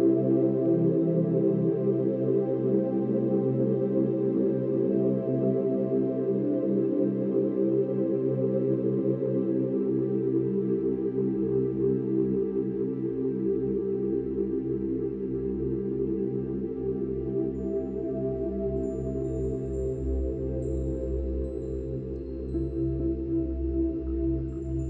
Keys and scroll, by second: 18.7 ctrl+z.